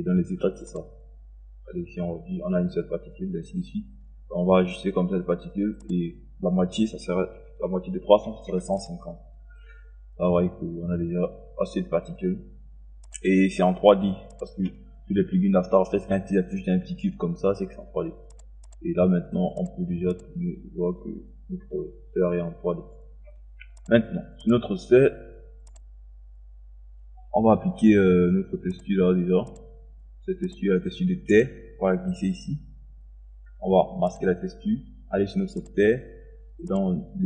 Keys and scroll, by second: 7.4 KP_1, 7.9 1, 8.2 KP_5, 8.6 KP_0.